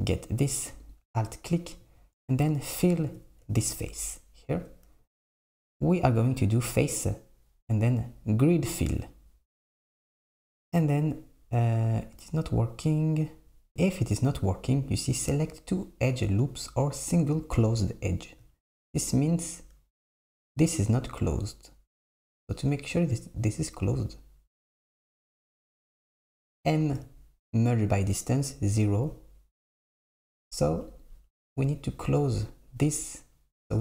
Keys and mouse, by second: 0.9 alt+click, 7.1-10.1 drag, 13.7-15.1 drag, 24.7 a, 24.9 m, 30.7 click, 31.5 Tab.